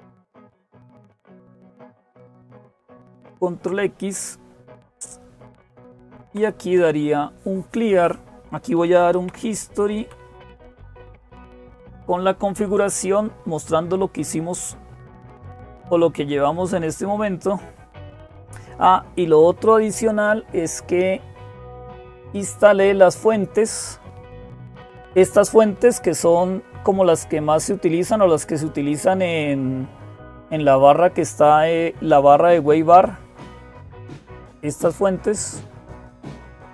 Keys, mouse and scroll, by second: 0.0-36.7 typing, 3.0 ctrl+x, 10.9 Tab, 11.6 Return, 22.1-23.3 drag, 25.0 click, 26.8-29.5 drag.